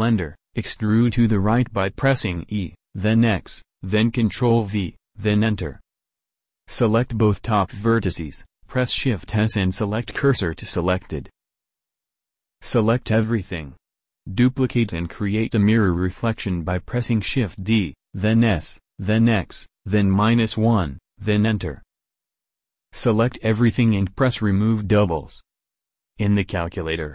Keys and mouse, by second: 3.5 e, 7.5-9.2 drag, 9.2 shift+s, 12.1 a, 12.4 a, 16.4 s, 23.7 a, 23.9 a, 25.3-26.8 drag.